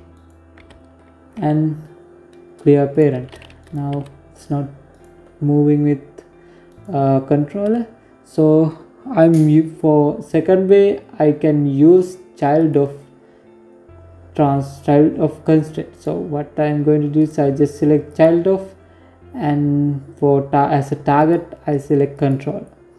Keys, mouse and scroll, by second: 2.4 right click, 2.7 g, 5.5 right click, 11.3 click, 15.9 click, 19.9 click.